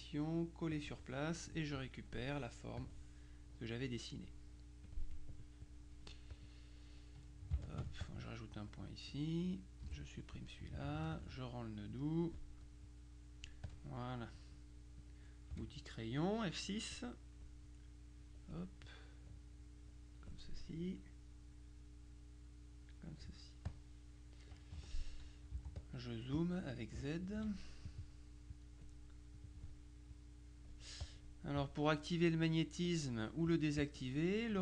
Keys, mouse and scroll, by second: 0.8 click, 2.8 click, 4.9 click, 6.4 click, 7.7-9.8 ctrl+alt+drag, 9.9 Delete, 11.2 ctrl+click, 12.0 click, 12.9 click, 15.1 click, 15.6 F6, 17.8-18.8 drag, 19.0-20.8 drag, 21.6-23.4 drag, 23.8 click, 24.8 Escape, 25.6 z, 25.8 click, 27.4 F2, 28.0 click, 28.6 click, 29.5 click, 30.2-31.7 drag, 33.6 click.